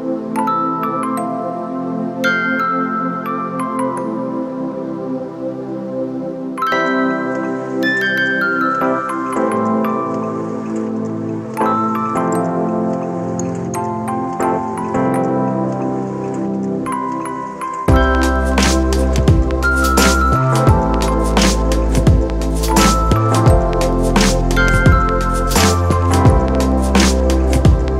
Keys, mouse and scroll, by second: 6.8 alt+shift+click.